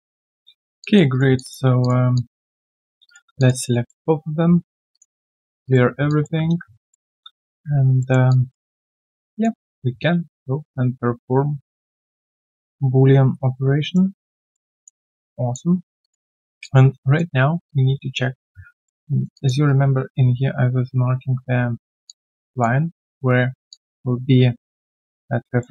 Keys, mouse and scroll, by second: 0.8 alt+click, 1.1 alt+right click, 1.3 alt+click, 1.6 q, 2.1 alt+click, 3.0 shift+click, 3.3 alt+click, 3.8 alt+middle click, 6.0 alt+click, 6.5 ctrl+a, 6.9 alt+middle click, 7.5 ctrl+a, 8.2 alt+middle click, 8.3 alt+click, 8.8 alt+middle click, 9.1 alt+click, 10.4 shift+right click, 14.3 alt+middle click, 14.7 alt+click, 15.1 alt+right click, 15.3 alt+click, 15.7 alt+right click, 16.0 alt+click, 16.3 alt+middle click, 16.6 alt+click, 17.4 alt+right click, 17.6 alt+click, 18.5 click, 18.5-18.8 alt+scroll down 4, 18.8 alt+middle click, 19.1 alt+right click, 19.3 alt+click, 19.6 alt+right click, 22.0 alt+click, 23.5 alt+click, 24.6 alt+middle click, 25.6 alt+middle click.